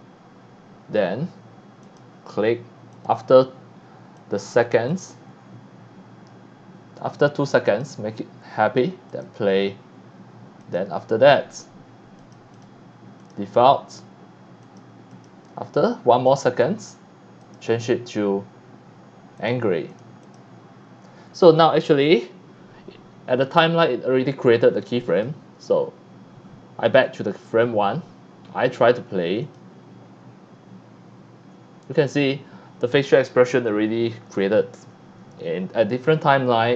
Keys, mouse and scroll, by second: 1.8 click, 2.9 click, 4.1 click, 4.9 click, 7.6 click, 9.0 click, 10.6 click, 12.2 click, 12.6 click, 13.2 click, 14.7 click, 15.1 click, 16.3 click, 17.4 click, 19.4 click, 19.9 click, 20.2 click, 25.1 click, 26.8 click, 27.0 click, 29.4 click.